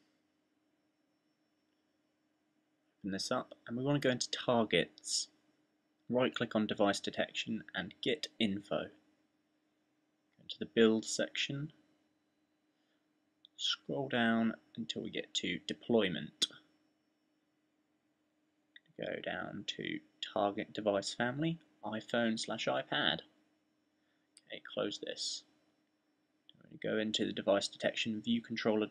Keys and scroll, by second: 0.0-0.2 typing.